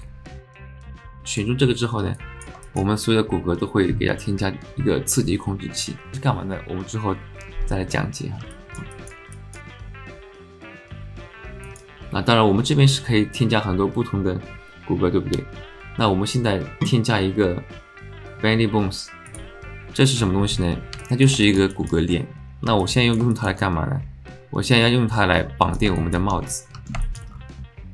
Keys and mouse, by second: 2.1 alt+click, 2.6 alt+shift+click, 8.5 alt+click, 8.9 shift+click, 9.3 alt+shift+middle click, 10.0 alt+middle click, 10.4 alt+shift+middle click, 11.8-20.0 drag, 21.1 click, 21.4 shift+click, 21.5 alt+shift+middle click, 21.7 alt+middle click, 22.8 alt+middle click, 23.3 shift+middle click, 24.8-25.8 drag, 26.0 alt+shift+click, 26.4 click, 27.0 shift+click.